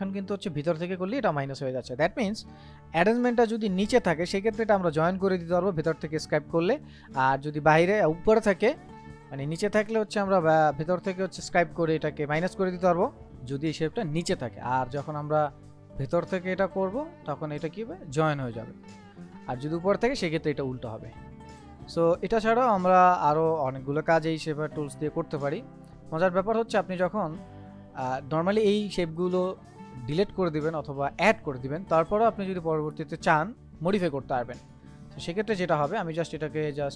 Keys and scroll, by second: 2.5 ctrl+z.